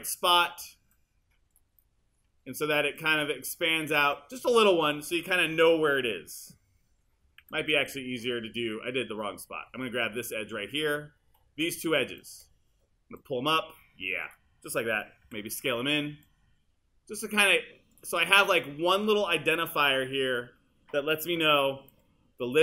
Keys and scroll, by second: 7.4 super+z, 15.3 r.